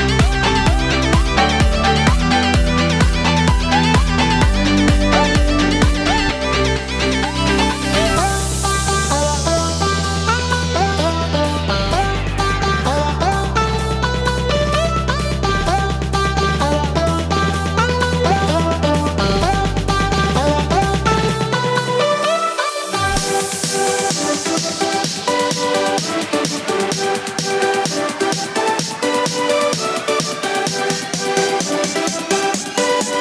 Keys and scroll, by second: 0.4 Delete, 1.9 Delete, 2.4 ctrl+z, 3.0 Delete, 7.7 ctrl+j, 11.3 Delete, 30.7 ctrl+g.